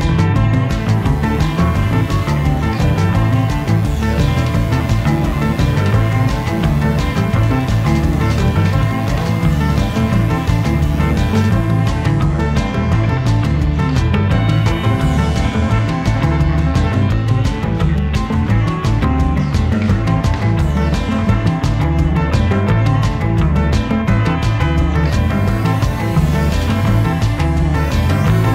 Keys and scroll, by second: 0.0 ., 0.3 3, 0.6 Return.